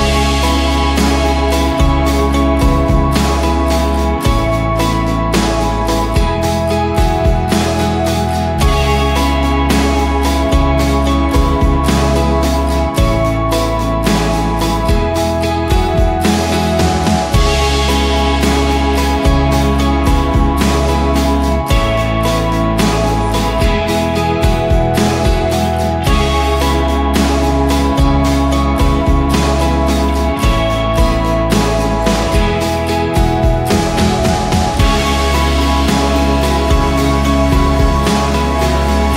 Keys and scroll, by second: 2.3 ctrl+j, 2.5 ctrl+t, 6.1 Return, 8.8-9.3 typing, 9.6 Return, 11.4-14.5 typing, 12.4 Tab, 12.6 Tab, 16.4 ctrl+g, 16.8-20.2 typing, 21.2 ctrl+[, 25.0 ctrl+h, 28.8-33.0 typing, 37.8-39.1 typing.